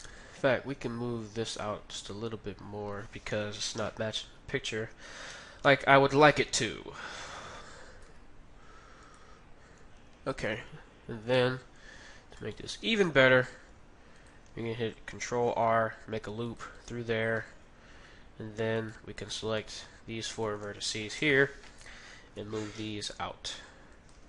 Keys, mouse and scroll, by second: 3.3 KP_3, 5.2 a, 5.7 z, 6.6 b, 8.1 g, 9.4-13.0 middle drag, 12.4-14.2 right drag, 13.6 g, 15.5 ctrl+r, 17.4-19.1 middle drag, 18.8-22.0 right drag, 19.1 middle click, 21.2 KP_3, 22.4 g.